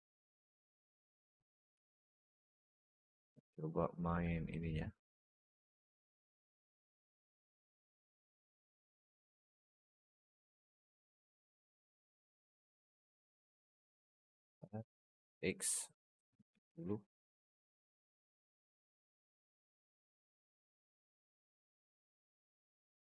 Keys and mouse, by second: 0.0-0.8 alt+middle drag, 3.5 middle drag, 4.0 r, 6.4-6.9 alt+middle drag, 7.1 shift+middle drag, 7.7 middle click, 11.2 s, 12.7 s, 13.8 t, 14.3 r, 17.7 click, 18.9 alt+middle drag, 19.6 alt+middle drag, 20.3-21.5 drag, 22.0-22.4 alt+middle drag.